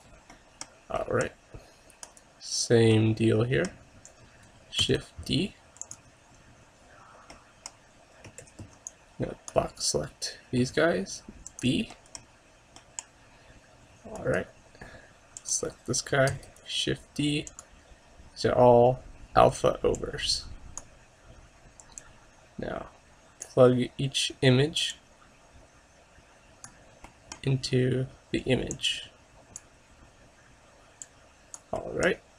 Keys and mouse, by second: 6.4-7.5 drag, 6.4 shift+d, 9.9 a, 9.9 b.